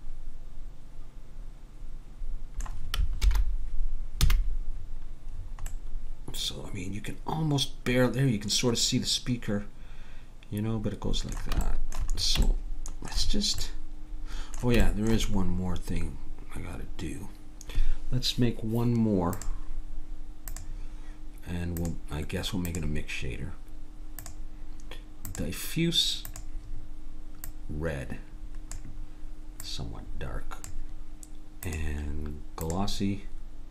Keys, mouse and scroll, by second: 3.2 alt+h, 4.2 a, 11.7-17.1 middle drag, 19.3-23.7 drag, 24.2-26.0 drag, 26.3-28.1 drag, 31.7-33.4 drag.